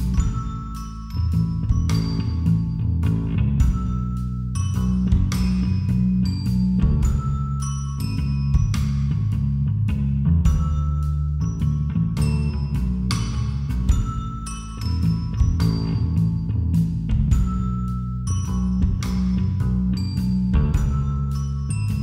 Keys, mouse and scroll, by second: 1.2 r, 21.0 middle click, 21.2-22.0 drag.